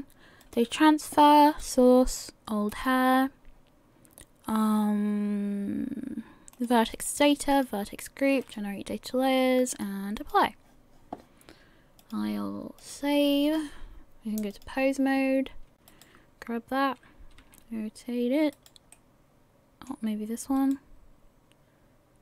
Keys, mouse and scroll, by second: 6.6 click, 6.9 click, 9.7 click, 12.0 click, 14.5 click, 16.7 right click, 17.4 r, 21.4 right click.